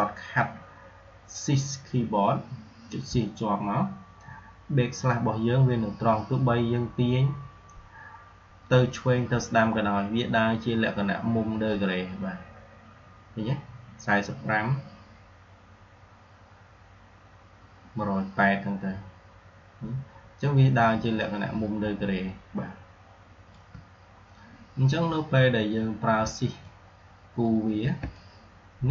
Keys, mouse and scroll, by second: 26.5-27.4 shift+click, 28.0-28.9 shift+click.